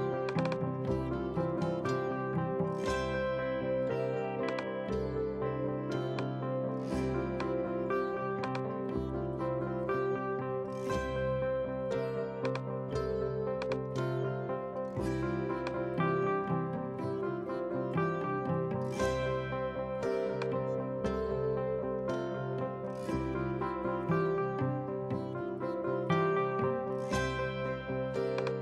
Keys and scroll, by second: 1.7-2.9 typing.